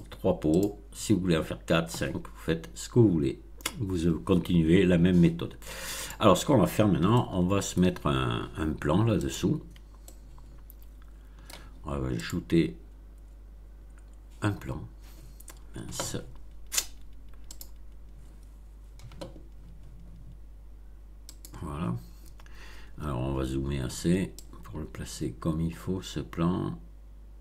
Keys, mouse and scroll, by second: 0.5 click, 1.2-1.5 scroll down 2, 5.9 click, 7.0-7.9 shift+middle drag, 9.2 click, 9.9-11.6 shift+middle drag, 12.1 click, 17.5 click, 21.2 click, 23.0-23.4 scroll up 3, 24.3-27.4 drag.